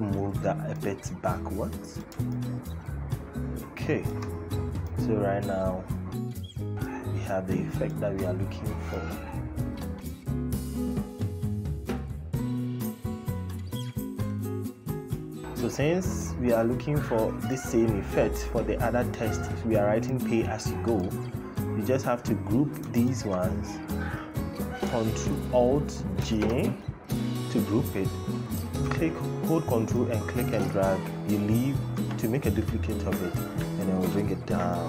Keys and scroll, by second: 26.0 alt+g.